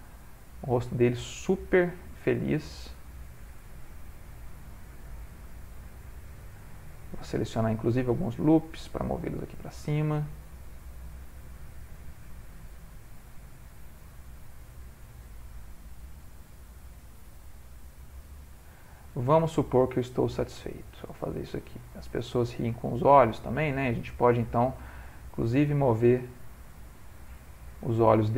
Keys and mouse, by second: 1.7 click, 2.5 click, 2.7 g, 5.5 ctrl+click, 6.9 alt+click, 8.4 g, 11.0 click, 11.2 g, 14.6 click, 14.8 g, 16.3 click, 16.8 g, 18.8 click, 19.4 g, 22.2 ctrl+middle click, 22.7 shift+middle click, 23.5 click, 24.1 g.